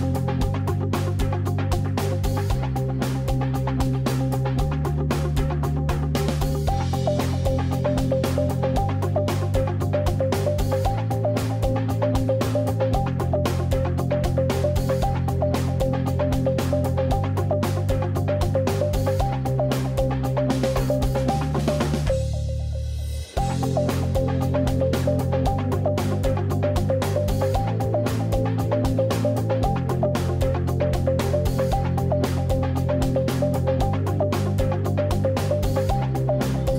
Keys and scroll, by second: 2.8 super+z, 7.5 super+z, 8.2 shift+super+z, 12.1 shift+space, 13.5 shift+super+z, 15.0 shift+super+z, 16.3 shift+space, 25.4 super+z, 26.0 super+z, 30.8 super+a, 30.9 super+3, 35.6 super+z.